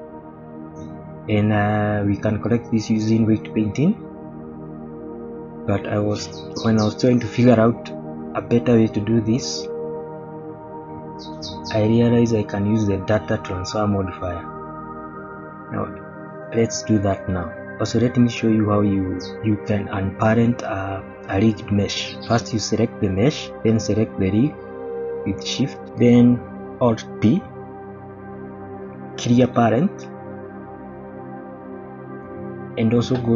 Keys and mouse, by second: 0.8-1.3 middle drag, 2.1-3.1 middle drag, 3.5-5.2 middle drag, 5.8-6.4 middle drag, 7.1-7.5 shift+middle drag, 7.8-9.4 middle drag, 10.2-10.6 shift+middle drag, 17.4-17.9 middle drag, 20.3 click, 20.8-21.9 middle drag, 25.7 shift+click, 27.6 alt+p, 32.4 shift+middle click.